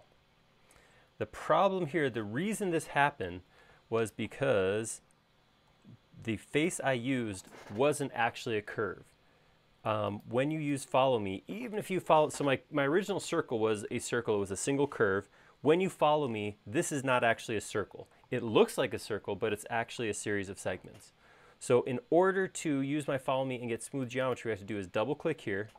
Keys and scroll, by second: 5.0 super+z.